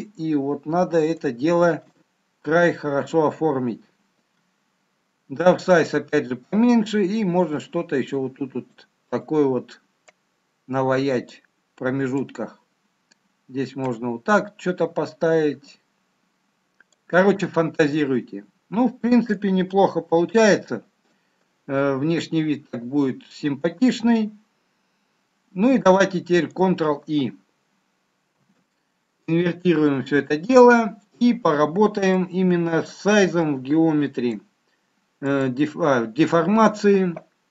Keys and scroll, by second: 28.4 ctrl+i.